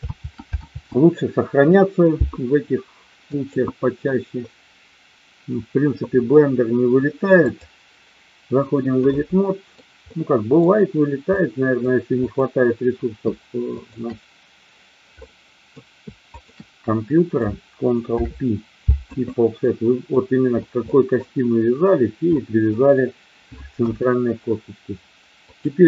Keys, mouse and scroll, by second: 0.0 ctrl+z, 0.5 ctrl+z, 3.3-7.5 drag, 9.1 middle click, 10.0 middle click, 11.3 middle click, 12.3 click, 13.8 shift+click, 15.3 middle click, 18.0 ctrl+p, 19.5 middle click, 20.9 middle click, 22.4 middle click, 23.8 KP_1, 25.4-25.8 drag.